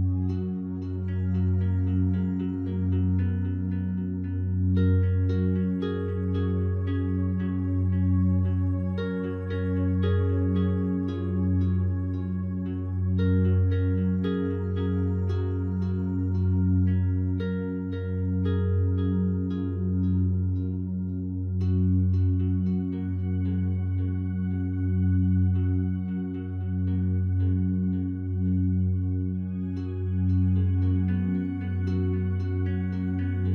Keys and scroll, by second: 25.9 ctrl+t.